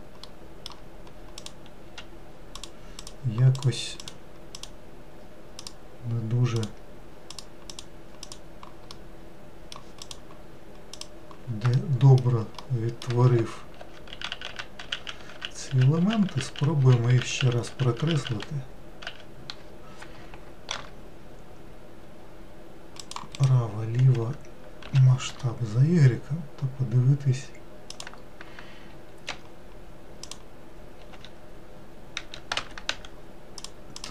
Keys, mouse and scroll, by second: 0.3-1.4 middle drag, 1.4 click, 1.9 q, 3.0 click, 3.5 click, 4.0 click, 4.5 click, 5.6 click, 6.6 click, 7.7 click, 8.2 click, 8.9-10.0 middle drag, 10.0 click, 10.9 click, 11.7 alt+middle click, 12.6 middle click, 13.4 ctrl+z, 13.8 ctrl+z, 14.1 ctrl+z, 14.3 ctrl+z, 14.5 ctrl+z, 14.8 ctrl+z, 15.0 ctrl+z, 15.3 ctrl+z, 16.0 ctrl+z, 16.3 ctrl+z, 16.4 ctrl+z, 16.8 ctrl+z, 17.1 ctrl+z, 17.4 ctrl+z, 18.2 ctrl+z, 19.0 ctrl+z, 20.7 ctrl+r, 24.8 s, 30.3 click, 31.1 q, 32.9 w, 33.6 click, 33.9 click.